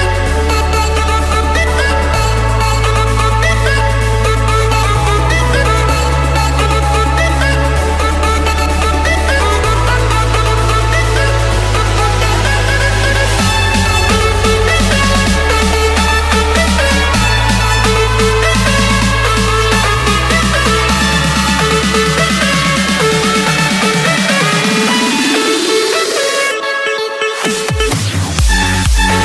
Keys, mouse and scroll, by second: 0.3 click, 0.7-1.1 scroll, 1.1 Escape, 2.5-3.4 typing, 4.5 Return, 8.6-9.8 drag, 10.9-12.1 drag, 13.1-14.2 drag, 15.3-15.8 typing, 16.2 Return, 17.4 Escape, 18.2 click, 19.1 click, 19.4-19.8 scroll, 20.7 click, 21.0 scroll, 22.0 click, 22.7 scroll, 23.6 click, 24.2 Escape, 26.0-27.1 drag.